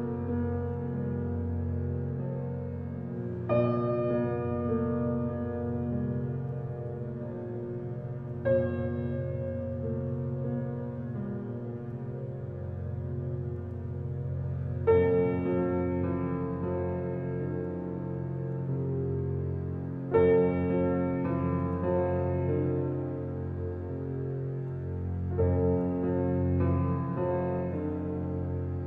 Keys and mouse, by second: 1.4 alt+click, 2.4 alt+click, 3.0 ctrl+alt+click, 3.4 ctrl+s, 4.5-5.6 alt+drag, 6.9 1, 7.7-8.4 ctrl+alt+drag, 8.4-10.6 ctrl+alt+middle drag, 10.6 ctrl+alt+click, 11.1 middle click, 11.2 click, 11.6-12.5 typing, 13.4 middle click, 13.6 click, 14.1-14.8 typing, 15.8-17.8 ctrl+alt+drag, 17.6 typing, 17.8 ctrl+s, 20.1-20.9 ctrl+alt+drag, 21.2 click, 24.8-25.5 drag, 27.3 ctrl+s, 28.7 click.